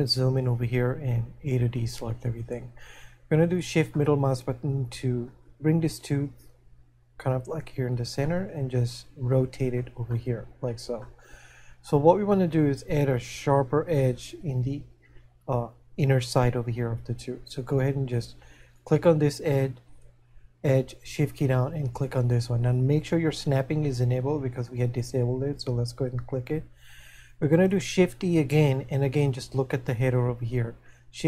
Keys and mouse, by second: 4.0 middle click, 8.6 middle click, 11.4 shift+middle click.